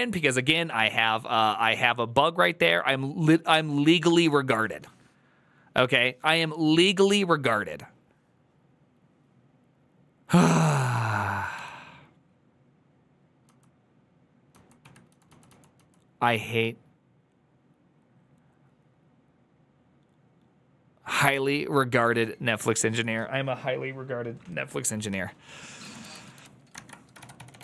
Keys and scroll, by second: 11.9 typing, 13.9-15.6 typing, 26.4-27.6 typing.